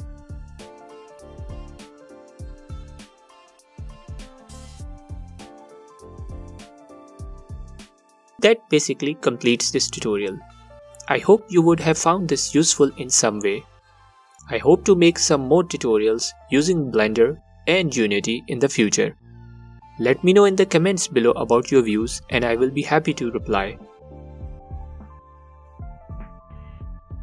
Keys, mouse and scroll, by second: 0.7 shift+d, 2.8-15.7 drag, 16.0-17.9 alt+drag, 17.8 scroll down 1, 17.9-18.7 middle drag, 18.7-19.9 alt+drag, 20.5 alt+middle click, 21.5-22.4 alt+drag, 22.3 scroll up 1, 22.4-23.3 middle drag, 22.9-23.3 scroll up 1, 23.3-24.2 alt+drag, 24.2-25.0 middle drag, 25.0-27.2 alt+drag.